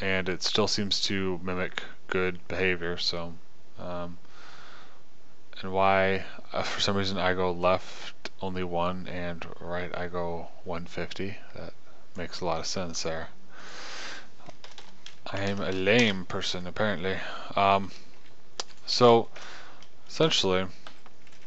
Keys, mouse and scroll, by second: 0.0-4.7 middle drag, 13.4-15.3 middle drag, 17.4-19.2 middle drag, 19.2 click, 19.9 KP_0.